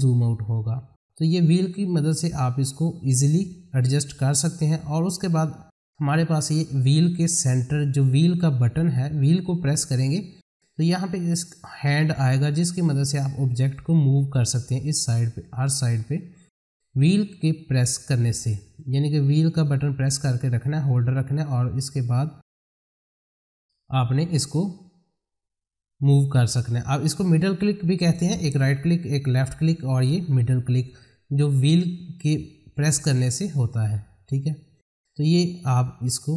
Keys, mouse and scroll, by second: 1.7-3.4 drag, 3.4 F4, 4.3 click, 6.4-28.9 middle drag, 33.1-36.3 middle drag.